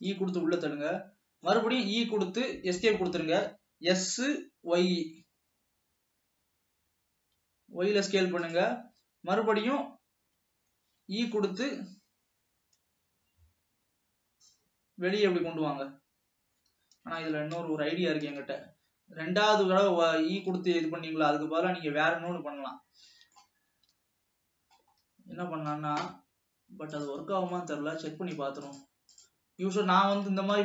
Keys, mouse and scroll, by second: 1.9 e, 3.6 s, 11.1 e, 17.4 ctrl+z, 18.9-19.7 scroll up 5, 19.7-20.8 middle drag, 20.8 ctrl+z, 21.4-22.5 scroll up 1, 22.5-23.9 middle drag, 23.9 ctrl+z, 25.1-27.1 scroll up 1, 27.1 click, 27.7-28.6 middle drag, 28.6 ctrl+s, 28.8 click, 29.3 click, 29.8-30.6 middle drag.